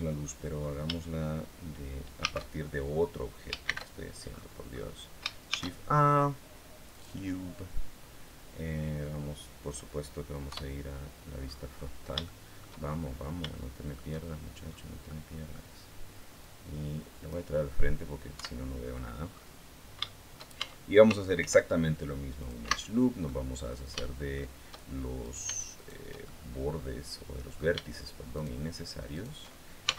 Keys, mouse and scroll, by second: 0.0-0.7 scroll down 2, 2.0 shift+a, 3.4 shift+c, 4.1-5.0 scroll up 4, 5.3 shift+a, 6.7 click, 10.3 KP_1, 11.2-12.0 scroll down 4, 12.0 shift+middle click, 13.2 shift+scroll up 2, 13.3 shift+middle click, 14.5 scroll down 2, 14.9 middle click, 16.2 click, 18.1 KP_1, 19.1-19.7 scroll up 2, 19.8 shift+middle click, 20.3 shift+Tab, 21.1 ctrl+r, 22.1 click, 22.4 Escape, 23.0 middle click, 23.8 shift+middle click, 25.0 shift+right click, 25.5 shift+right click, 26.0-27.5 shift+middle drag, 28.1 shift+right click, 28.9 shift+right click, 29.6 shift+x.